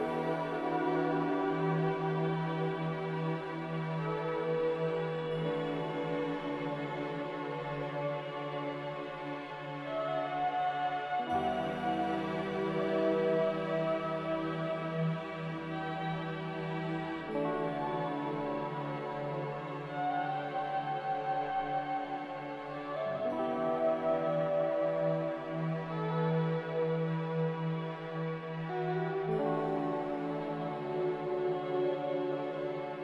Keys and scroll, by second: 10.3 b, 12.1 Delete, 13.5 a.